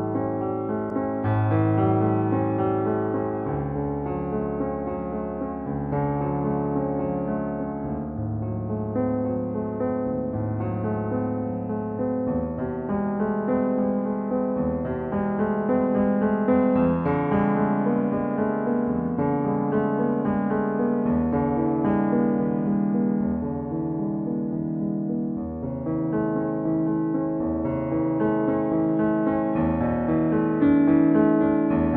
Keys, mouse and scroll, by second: 6.9-7.4 typing, 16.1 click, 17.6-22.6 middle drag, 22.6-23.3 scroll down 1, 23.3-23.7 scroll up 1, 23.9-25.6 middle drag, 25.6 click, 27.0-31.9 middle drag.